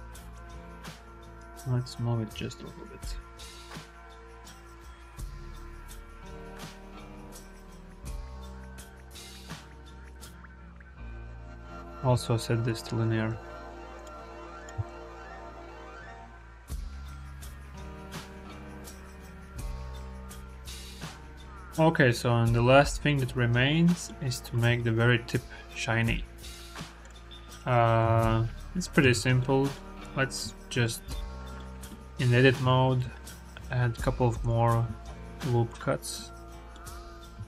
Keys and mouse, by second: 2.7-4.3 drag, 5.2 i, 6.7 click, 6.9 space, 8.1 KP_0, 11.1 click, 11.1 space, 11.4 click, 11.7 click, 13.2 t, 14.4 click, 14.6 space, 15.1 click, 16.4 click, 22.3-23.9 middle drag, 27.9 h, 28.1 click, 28.9 Tab, 29.2 click, 30.4 shift+b, 31.4 shift+click, 32.1 click, 32.6 shift+click, 33.4 ctrl+r, 34.8 ctrl+r, 36.1 shift+click.